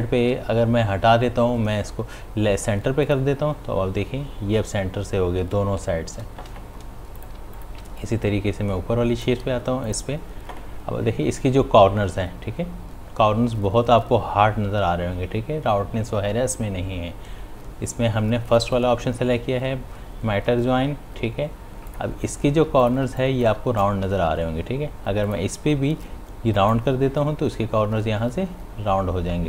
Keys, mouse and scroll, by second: 3.9 click, 21.9 click, 22.6 space, 22.8 ctrl+click, 23.2 click, 23.5 space, 25.3 click.